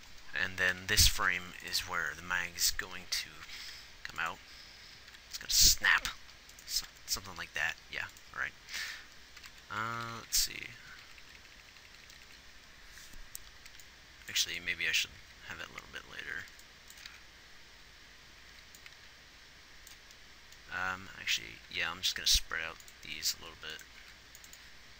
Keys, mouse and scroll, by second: 1.0 Right, 3.9 r, 5.4 r, 9.9-11.2 Left, 11.4-12.5 Right, 15.6 alt+a, 16.8 alt+a, 18.9 alt+a, 21.0 a, 21.9 g, 24.4 g.